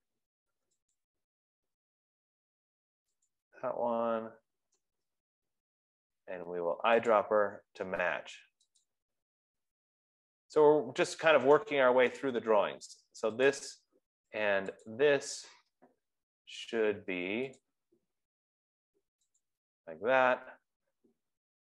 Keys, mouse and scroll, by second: 1.4 click, 3.8 click, 12.4 click, 12.9 click, 13.9 click, 15.5 shift+click, 19.8 click.